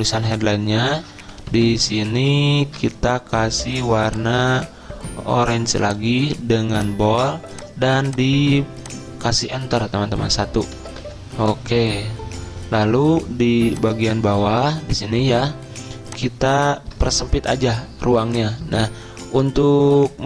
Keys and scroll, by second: 0.5 Delete, 1.6 ctrl+shift+Right, 1.7 ctrl+shift+Right, 10.0 BackSpace, 10.9 BackSpace, 11.2 Return.